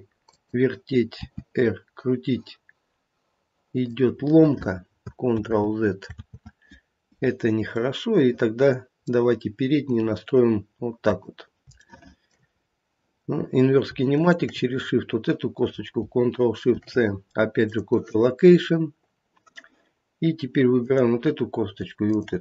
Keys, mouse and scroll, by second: 1.2 r, 5.3 ctrl+z, 6.2 ctrl+z, 8.0 middle click, 9.4 scroll down 1, 9.8 click, 11.0 click, 11.8 shift+middle click, 12.6-13.1 scroll up 2, 13.1 scroll down 1, 14.1 shift+click, 16.7 ctrl+shift+c, 20.7 click, 22.1 shift+click.